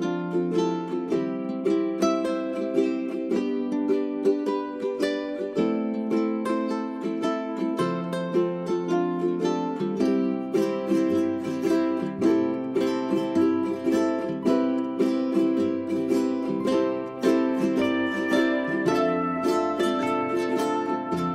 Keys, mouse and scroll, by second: 1.3 space, 2.0 1, 2.5-9.6 drag, 11.8-12.2 scroll down 1, 12.2 middle click, 14.6 click, 15.1 g, 15.3-21.3 drag.